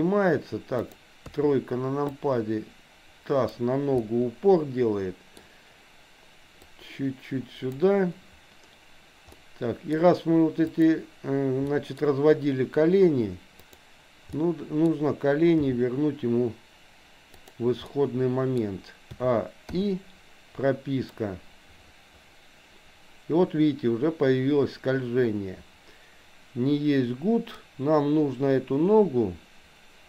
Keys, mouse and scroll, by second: 0.9 click, 1.2 KP_3, 2.2-3.6 drag, 4.0-5.4 middle drag, 6.9-7.9 drag, 9.4 middle click, 10.7 click, 11.6 middle click, 13.6 click, 14.4 middle click, 15.6 g, 18.0 middle click, 19.1 a, 19.7 i, 21.1-30.0 drag.